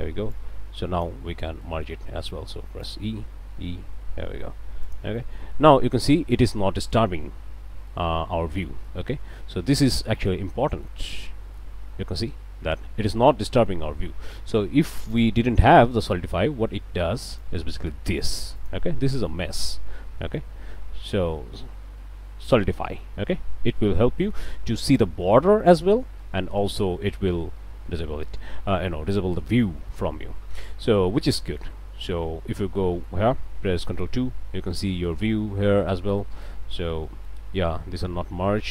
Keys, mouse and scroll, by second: 0.3 click, 1.6 click, 2.0 a, 2.8 alt+click, 3.2 alt+e, 4.8 click, 5.8-7.0 drag, 7.8 scroll up 1, 8.0 click, 9.0 click, 10.0 scroll down 2, 10.3 click, 11.2 click, 15.1 click, 17.3 click, 18.2 click, 18.6 click, 19.3-20.6 middle drag, 22.5 click, 23.0-24.5 middle drag, 25.6-27.0 middle drag, 28.0-29.4 middle drag, 29.9-31.0 middle drag, 31.1 scroll down 1, 31.4 middle click, 31.8 scroll up 1, 32.2 Tab, 32.6 click, 33.9 ctrl+2, 34.7 click, 36.2 click, 36.7 Tab, 37.0 middle click, 37.5 scroll up 1.